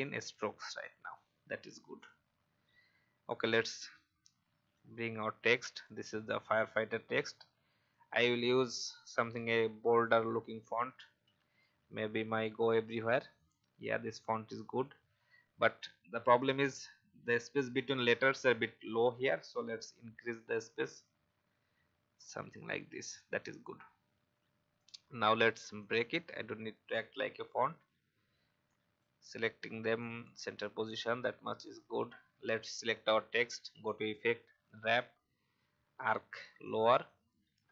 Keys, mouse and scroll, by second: 2.4-3.1 scroll down 1, 3.2 alt+scroll down 1, 4.7 click, 6.3-6.7 alt+scroll up 1, 7.4-7.9 scroll up 1, 7.9-9.3 drag, 11.1 g, 12.8-15.3 drag, 15.7 alt+scroll up 1, 20.1 shift+scroll up 1, 23.1 alt+scroll up 1, 23.7-24.1 scroll down 1, 24.7 right click, 25.7 click.